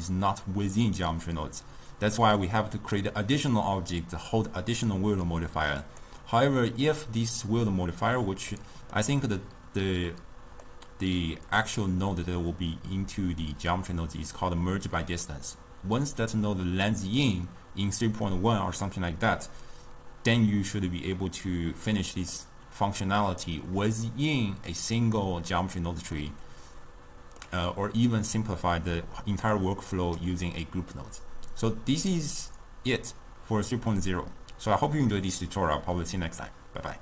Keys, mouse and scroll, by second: 5.9 click, 8.7-16.2 middle drag, 21.2-24.2 middle drag, 25.1 click, 26.3-29.6 middle drag, 29.6-34.6 drag.